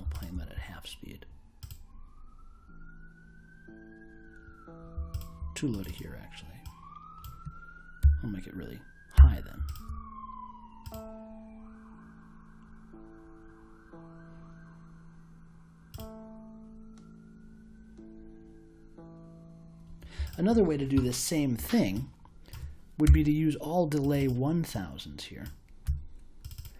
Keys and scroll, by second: 8.0 4, 9.1 ., 23.0 BackSpace, 25.8 1.